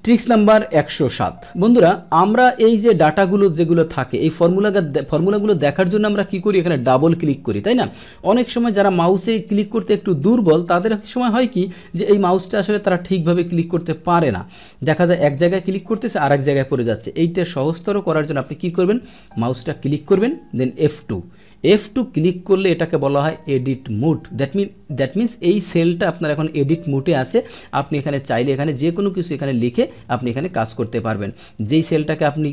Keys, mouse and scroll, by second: 0.0 Tab, 2.4 click, 3.2 click, 4.4 click, 5.3 click, 6.8 click, 7.0 click, 8.1 Return, 11.3 click, 14.5 click, 15.5 click, 16.2 click, 19.2 click, 28.0 BackSpace, 29.8 BackSpace, 30.7 Return, 30.9 Return, 31.6 Right, 31.7 Right.